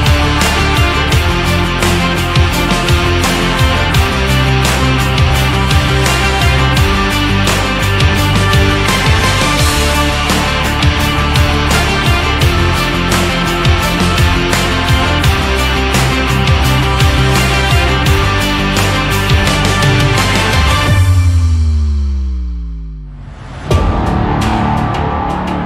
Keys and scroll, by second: 17.6 ctrl+=.